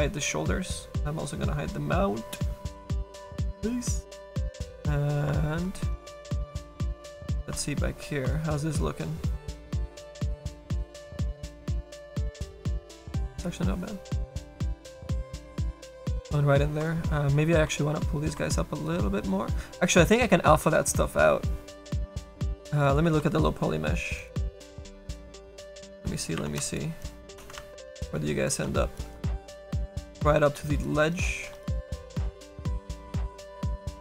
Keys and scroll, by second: 24.9 space, 27.7 ctrl+z, 28.3 a, 31.9 a, 32.9 z.